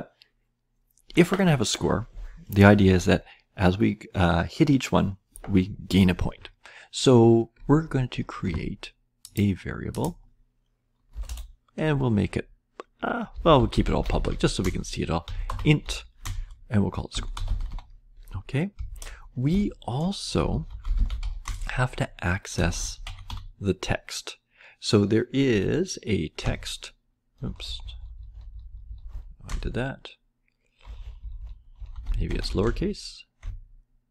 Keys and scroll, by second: 11.0 Return, 11.2 Return, 13.0-19.2 typing, 19.4 Return, 20.4 Return, 20.6-23.7 typing, 26.3 space, 27.4-29.0 typing, 30.8-34.1 typing.